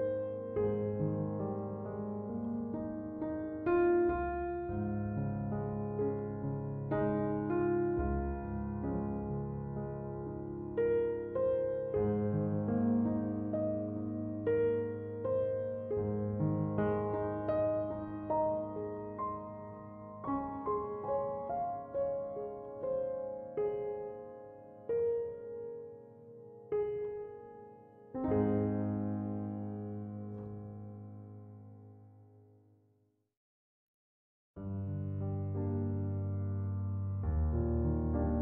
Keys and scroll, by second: 0.0-0.1 typing, 3.4 5, 3.6 Return, 9.9 Return.